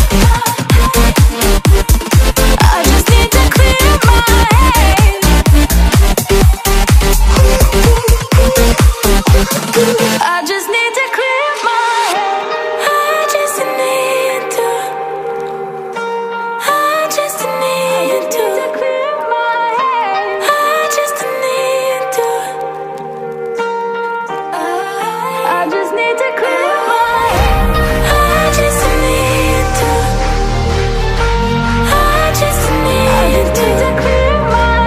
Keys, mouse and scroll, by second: 1.3 ctrl+alt+g, 8.4 ctrl+alt+g, 8.8 ctrl+t, 10.1 ctrl+-, 13.7-17.9 drag, 17.9 double click, 18.6-27.5 drag, 27.5 double click, 29.7 click, 32.0 KP_0.